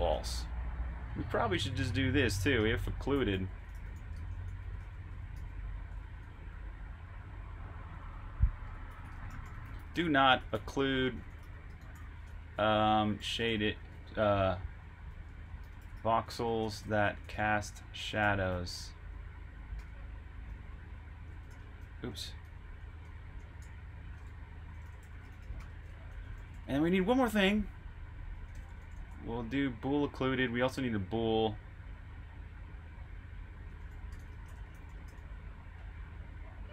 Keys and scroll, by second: 7.4-12.5 typing, 19.7 typing, 19.8 Return, 20.4 Escape, 21.2 Escape, 21.4-23.0 typing, 24.0-25.8 typing, 29.7-30.5 typing, 32.3 typing, 33.5-35.6 typing.